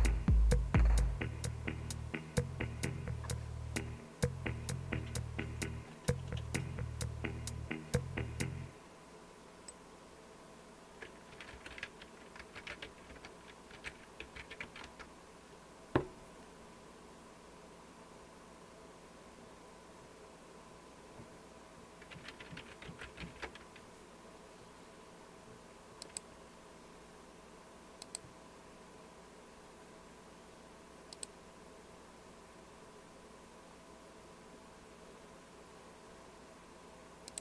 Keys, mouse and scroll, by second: 11.3-15.7 typing, 13.1 Return, 22.6-23.4 typing, 25.9-26.7 typing, 26.0 click, 28.0 click, 31.1 click, 37.3 click.